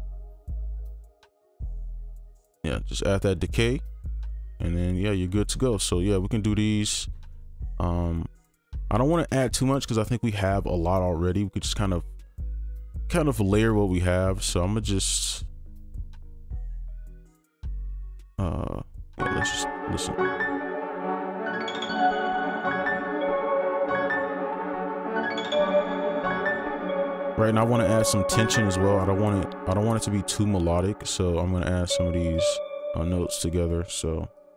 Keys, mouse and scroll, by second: 5.1 typing, 7.4 right click, 8.6-10.7 scroll down 1, 14.0 right click, 19.1 space, 19.9 space, 22.4 space, 26.0 space, 30.1 alt+click, 32.3 double click, 33.5 ctrl+click.